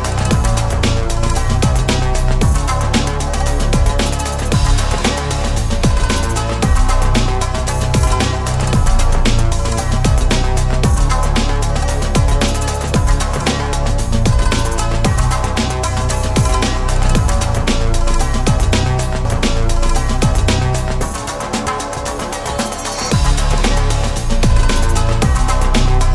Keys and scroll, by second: 10.2 ctrl+z.